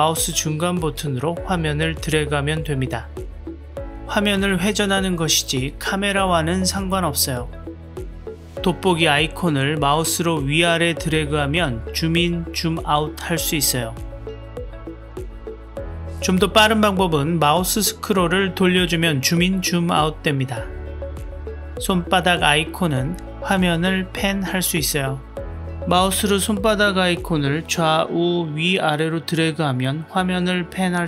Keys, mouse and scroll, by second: 9.7-15.6 drag, 23.3-30.8 drag.